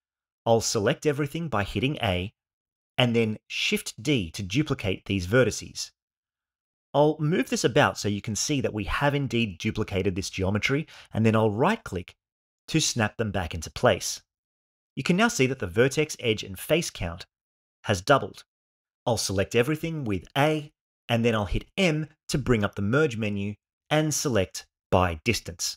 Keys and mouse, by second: 2.1 a, 4.7 shift+d, 19.9 a, 22.7 m.